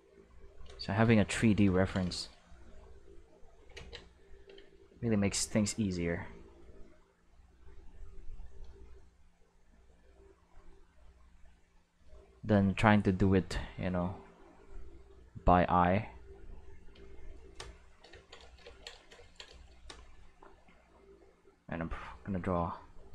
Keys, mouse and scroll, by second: 0.1 click, 1.8 ctrl+shift+middle click, 2.9 click, 3.8 ctrl+z, 5.0-6.6 drag, 7.2-8.7 drag, 9.4-11.8 drag, 12.7-16.8 drag, 17.2 shift+middle click, 18.2 ctrl+middle click, 18.6 ctrl+middle click, 19.2 ctrl+middle click, 22.2 click.